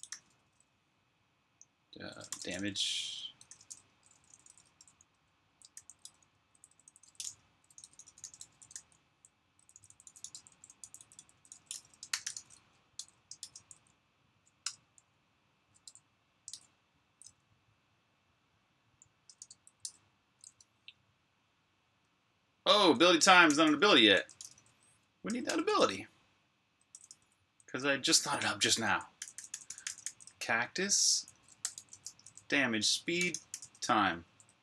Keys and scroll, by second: 1.8-9.8 typing, 14.5 Return, 14.5 typing, 15.7 s, 16.3 super+v, 19.2-21.8 typing, 23.2-25.5 typing, 26.6-34.6 typing.